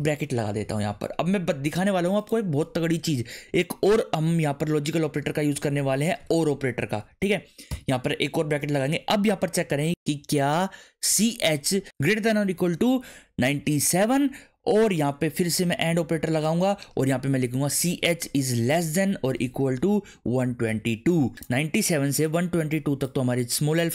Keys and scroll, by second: 5.4 shift+space, 5.7 shift+\, 7.1 space, 7.7 shift+9, 10.8-11.7 typing, 13.5-14.4 typing, 15.6-21.2 typing.